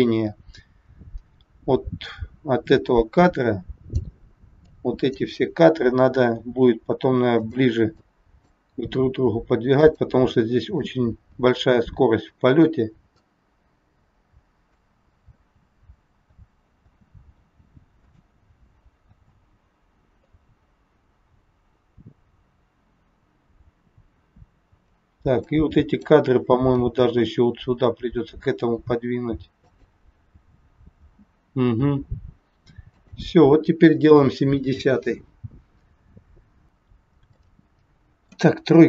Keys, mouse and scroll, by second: 4.6 click, 6.4 g, 8.0 click, 8.7 g, 10.2 click, 11.1 g, 13.1 click, 15.2 space, 16.3 space, 16.7 space, 17.3 space, 18.1 click, 18.5 space, 19.1 space, 20.2 click, 25.3 click, 26.7 g, 30.2 space, 31.1 space, 33.0 click, 35.5 scroll down 1, 36.0 scroll down 1, 37.3 middle click.